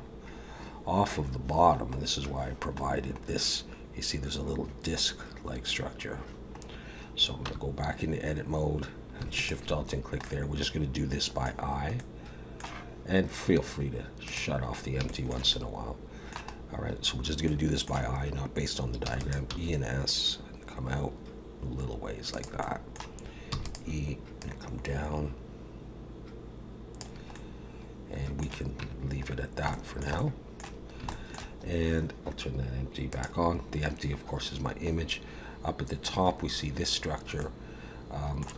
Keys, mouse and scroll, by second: 0.8 scroll down 2, 2.0-2.4 scroll down 1, 2.8 scroll down 2, 6.6 scroll up 2, 7.5 Tab, 8.0 scroll up 3, 9.4 alt+shift+click, 9.9 scroll down 2, 10.2 middle click, 12.0 middle click, 14.3 click, 15.1 shift+middle click, 15.5 middle click, 16.5-17.3 scroll up 1, 17.3 scroll up 1, 17.4 middle click, 19.0 e, 19.5 s, 22.6 middle click, 23.5 e, 24.4 click, 27.3 middle click, 28.8 Tab, 29.3-29.6 scroll down 2, 29.7 shift+middle click, 30.1 middle click, 31.1 shift+middle click, 33.1 click, 34.9-36.1 scroll up 1, 37.4 middle click.